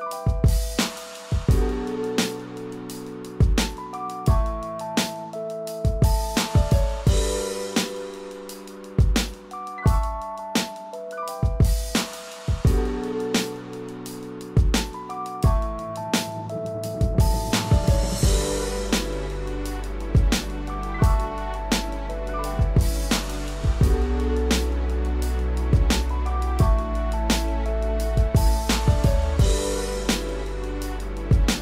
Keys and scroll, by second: 20.8 ctrl+z, 21.4 ctrl+alt+z, 30.6 ctrl+0.